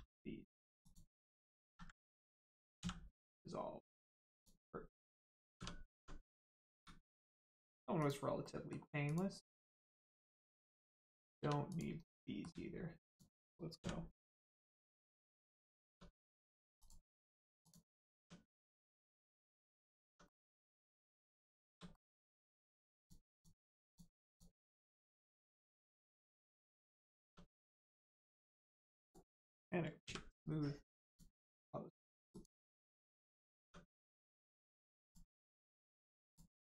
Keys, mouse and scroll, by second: 0.8 click, 1.6 ctrl+z, 2.7 z, 4.3 click, 5.5 Tab, 6.2 scroll up 1, 7.1 shift+middle click, 7.9 click, 8.4 middle click, 9.0 click, 9.4 middle click, 11.7 click, 12.0 middle click, 13.0 shift+click, 13.7 click, 15.2 click, 15.9 Tab, 16.1 middle click, 16.5 scroll down 1, 16.7 click, 17.1 middle click, 17.2 Tab, 17.6 click, 17.9 middle click, 18.1 Tab, 19.2 middle click, 19.5-20.0 scroll up 1, 20.0 Tab, 20.2 middle click, 20.7 click, 21.3 shift+click, 21.9 middle click, 22.6 shift+click, 22.9 shift+click, 23.3 shift+click, 23.8 shift+click, 24.3 shift+click, 24.6 middle click, 25.1 right click, 26.7 click, 27.2 Tab, 27.7 middle click, 27.9 right click, 29.0 click, 29.5 middle click, 30.0 q, 31.0 click, 32.0 middle click, 32.3 click, 32.7 middle click, 33.0 Tab, 33.3 middle click, 33.5 Tab, 34.6 scroll down 1, 35.0 click, 35.3 middle click, 35.6 Tab, 35.9 middle click, 36.2 click, 36.5 middle click.